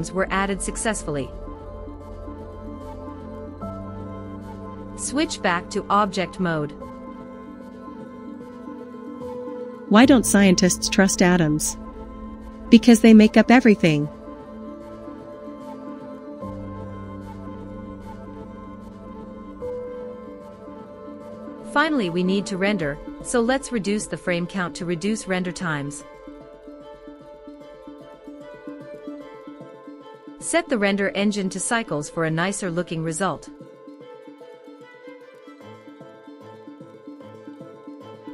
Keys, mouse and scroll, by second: 0.1 click, 2.2 click, 6.0-7.0 drag, 8.6 click, 9.5 space, 14.8 space, 18.4-21.8 drag, 25.0 click, 29.7 click, 30.8-32.1 drag, 33.2-34.1 drag, 36.1 click.